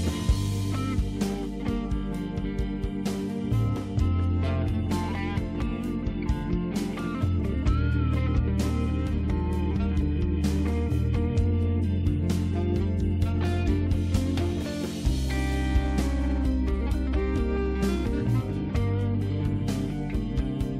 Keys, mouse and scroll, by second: 0.8 click, 0.9 click, 3.9 click, 7.4 click, 11.3 click, 11.5 click, 11.9 click, 12.0 click, 12.1 click, 12.2 double click, 13.6 click, 13.9 click, 14.2 click, 14.3 click, 14.4 click, 16.1 click, 18.3 click, 19.1 click.